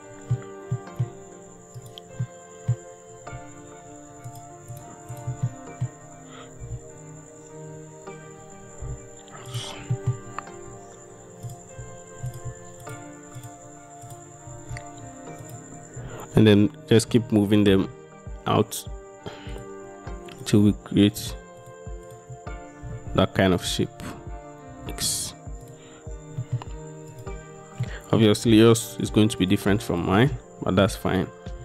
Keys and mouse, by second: 0.8 middle click, 1.8 middle click, 2.3 middle click, 3.9 shift+middle click, 4.4 shift+click, 5.3 shift+middle click, 5.5 click, 5.9 middle click, 6.7 g, 8.9 x, 9.6 click, 10.0 click, 14.1 shift+click, 15.5 shift+click, 17.1 g, 17.8 x, 19.6 click, 21.7 shift+click, 22.9 g, 24.8 x, 26.5 click, 27.2 click, 27.9 middle click, 29.0 middle click, 30.5 middle click.